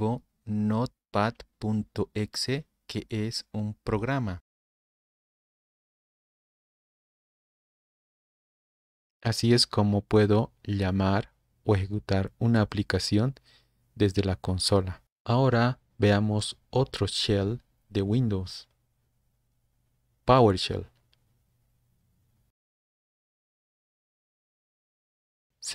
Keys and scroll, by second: 1.1 super+Left, 1.1-2.4 typing, 3.4 Return, 22.2-23.0 typing, 23.3 Return.